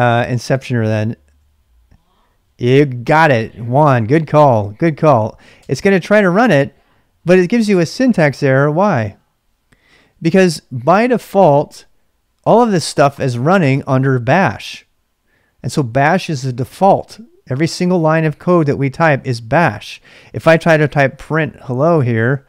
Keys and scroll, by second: 5.5 Return, 17.9-18.7 typing, 20.3-22.4 typing.